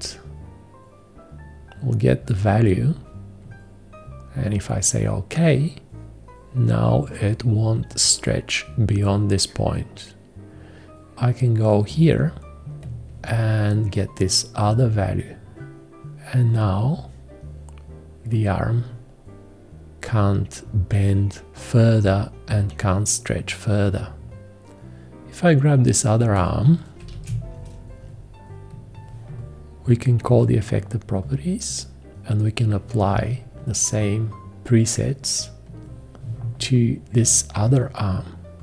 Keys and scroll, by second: 27.1 shift+1.